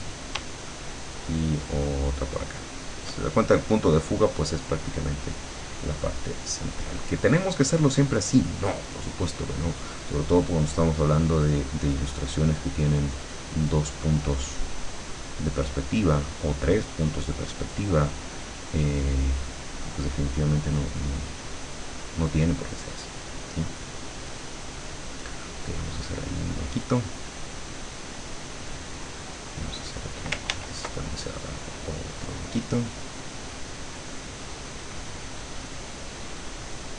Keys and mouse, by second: 1.1-3.2 shift+drag, 11.0 click, 13.4-15.1 drag, 15.6 click, 17.4-19.4 drag, 20.0-22.3 drag, 23.5-25.0 drag, 27.2-28.5 drag, 28.8 click, 30.6 ctrl+z, 31.3-32.7 ctrl+drag, 33.2 click, 33.7-35.8 drag, 36.1 click.